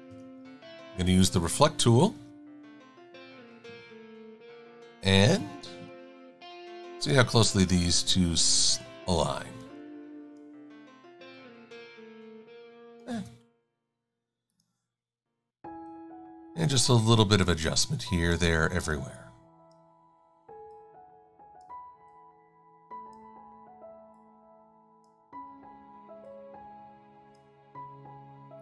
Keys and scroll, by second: 5.8 e, 9.5 e.